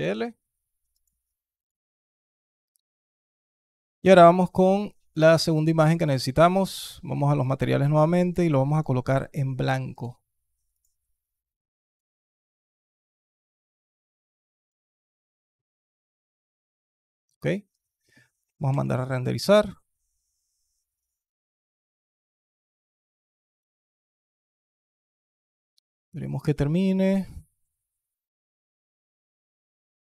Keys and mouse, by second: 4.9 click, 5.3-5.8 alt+drag, 7.3 drag, 10.5 click, 12.2 click, 13.2 click, 18.7 F12.